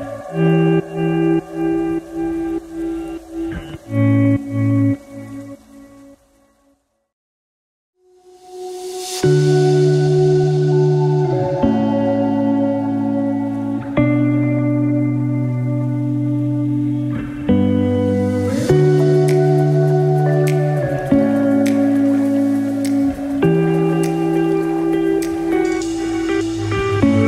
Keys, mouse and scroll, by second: 10.9-11.6 scroll down 1, 11.6 middle click, 17.1 alt+z, 18.3 middle click, 21.0-21.4 scroll down 1, 21.4 middle click, 22.2-22.5 scroll up 5, 22.7 middle click, 26.1 scroll down 4.